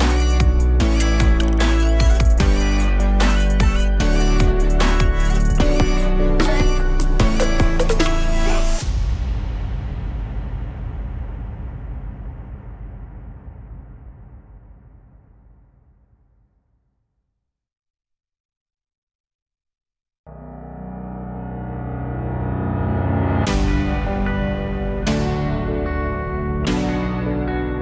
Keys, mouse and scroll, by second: 3.3-9.4 drag, 10.1-10.8 drag, 10.8-12.1 drag, 12.1 t, 13.6-15.1 drag, 15.2-17.4 drag, 17.4 middle click, 18.3-20.8 drag.